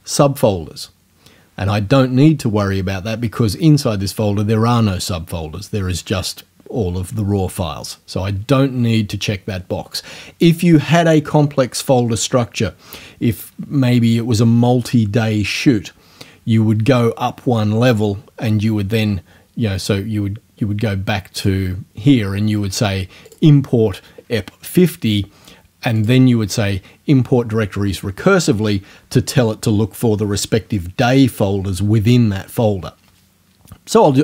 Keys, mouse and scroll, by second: 21.4 click, 23.3 click, 26.0 click.